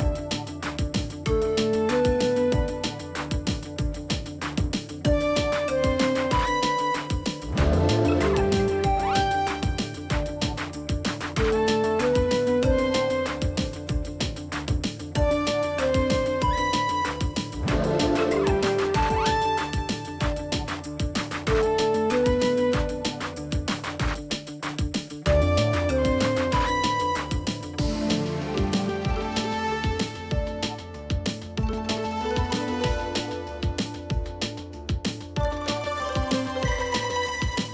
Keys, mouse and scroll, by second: 1.2 shift+click, 3.1 scroll up 1, 3.2-3.5 alt+scroll, 3.5 alt+space, 3.9 double click, 5.5 alt+scroll up 1, 5.8 space, 6.2-7.0 scroll up 2, 7.0-7.4 alt+scroll down 1, 7.6-7.9 alt+scroll down 1, 7.9 alt+space, 9.9 t, 10.4 ctrl+a, 16.6 b, 16.9 r, 18.4 l, 22.4 double click, 25.9 t, 27.2 Return, 27.7 Up, 28.3 BackSpace, 29.9 End, 30.0 Delete, 30.5 space.